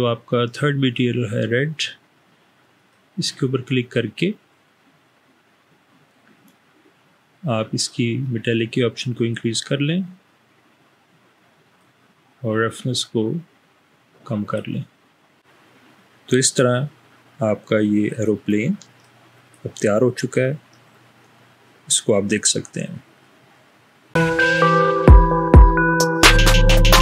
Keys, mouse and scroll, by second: 8.5-11.9 drag, 13.2 click.